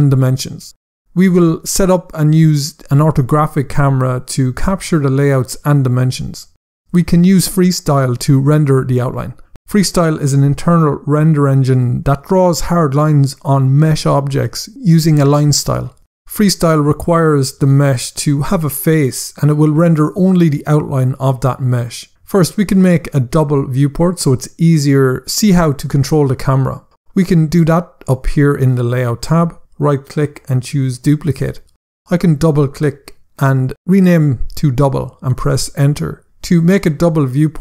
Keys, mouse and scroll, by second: 29.9 right click, 31.0 click, 32.4 double click, 33.1-34.4 typing, 34.8 Return.